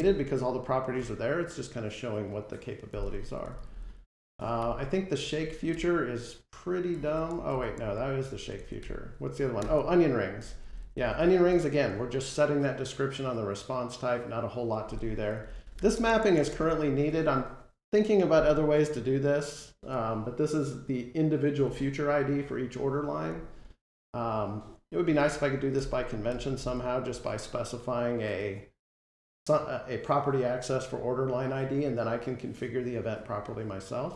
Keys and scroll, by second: 4.5 alt+End, 8.7 alt+End.